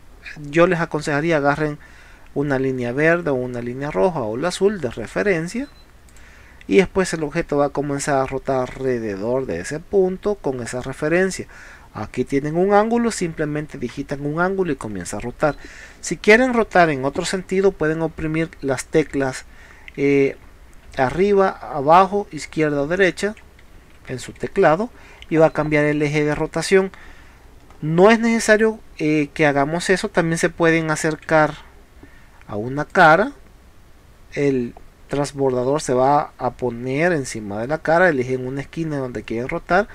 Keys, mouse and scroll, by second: 0.1 middle click, 4.8 middle click, 6.1 click, 15.0 Escape, 17.9 Up, 18.4 Down, 19.2 Right, 20.3 Up, 21.3 Down, 22.0 Left, 22.5 Right, 22.9 Left, 23.2 Up, 23.8 Down, 24.2 Left, 24.4 Up, 24.5 Right, 25.0 Left, 25.1 Down, 25.3 Left, 25.6 Up, 27.7 middle click, 31.4 Down, 32.9 click.